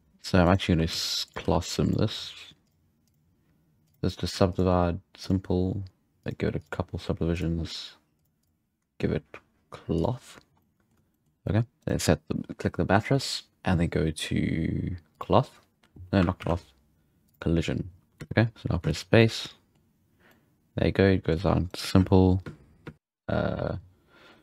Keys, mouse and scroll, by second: 0.7 s, 1.4 g, 2.6 click, 3.0-4.5 drag, 5.2-7.3 drag, 8.1 click, 9.9 click, 10.6-11.8 middle drag, 11.8-14.2 right drag, 15.1-16.5 drag, 16.5 ctrl+z, 17.2-18.2 drag, 18.2 space, 18.8 space, 19.1-21.7 middle drag, 21.7 right click, 21.9 space, 22.4 space, 22.8 space, 22.9 click, 22.9 space.